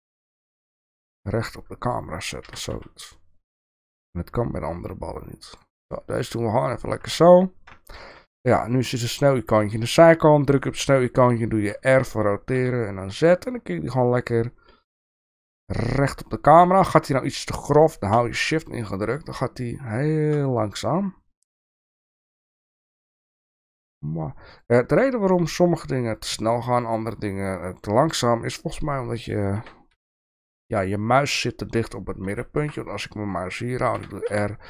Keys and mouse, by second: 0.2-1.2 middle drag, 2.4 g, 7.0 KP_0, 7.8 shift+middle drag, 9.1 click, 11.6 r, 29.5 r, 33.9 r.